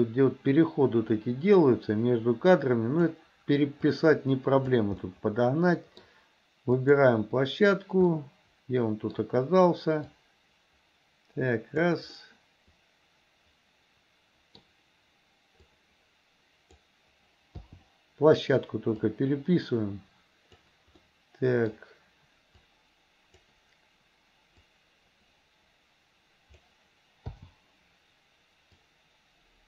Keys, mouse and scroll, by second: 4.0-4.9 drag, 5.1-6.1 middle drag, 6.8 click, 8.2-9.2 middle drag, 10.2-11.9 drag, 12.2-14.6 middle drag, 15.6-16.9 drag, 19.1-20.7 drag, 21.1 middle click, 22.7 click, 24.7-26.7 drag, 28.9-29.6 drag.